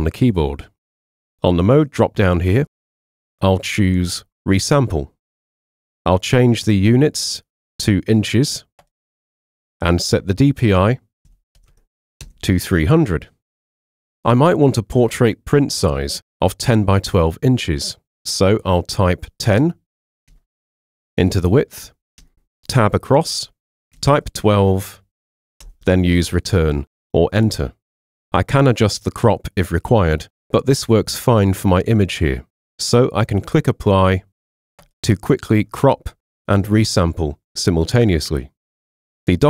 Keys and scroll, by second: 0.7 c, 11.3 3, 11.6 0, 12.2 Return, 20.3 1, 20.7 0, 22.2 Tab, 23.7-24.7 typing, 25.6 Return.